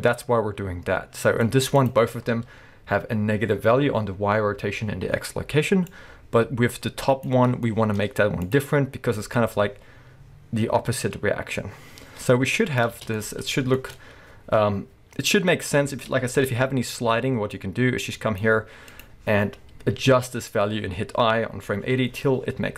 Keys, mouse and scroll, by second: 6.0-7.6 drag, 7.4 scroll down 2, 7.6 shift+middle click, 8.5-13.1 drag, 12.9 space, 13.1 middle click, 15.9 space, 16.4 KP_1, 17.6-19.0 drag.